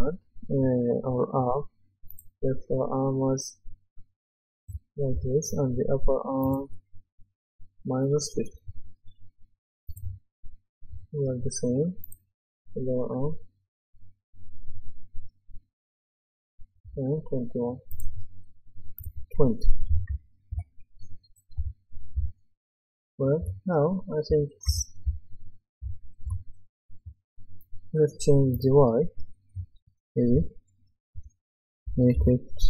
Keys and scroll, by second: 4.7-5.1 typing, 19.9 KP_2, 20.5 Return, 21.6-27.0 typing, 29.5 KP_1, 30.3 Return, 31.9 KP_1.